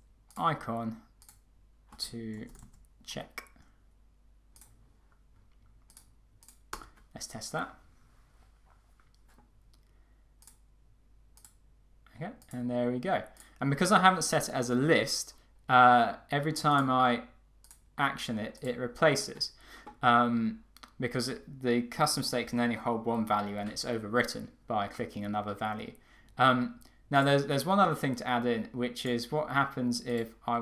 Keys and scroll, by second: 6.9 Return.